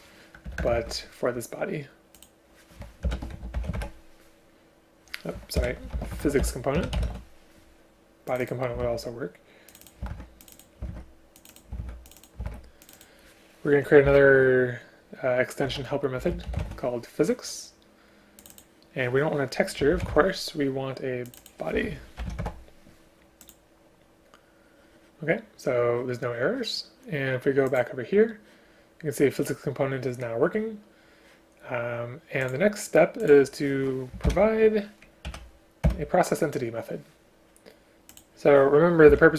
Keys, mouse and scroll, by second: 0.5 Return, 0.7 Return, 0.9 ctrl+v, 3.1 ctrl+BackSpace, 5.6 ctrl+BackSpace, 6.8 BackSpace, 8.9 ctrl+c, 10.2 ctrl+v, 10.9 ctrl+v, 11.8 ctrl+v, 34.3 ctrl+o, 35.3 Down, 35.9 Return, 39.2 Delete.